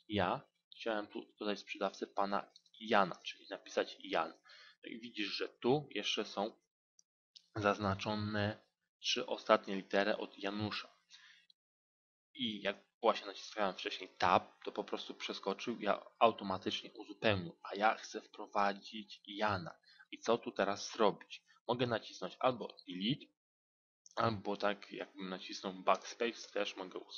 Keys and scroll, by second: 11.7 Tab, 22.7 Delete, 25.1 BackSpace.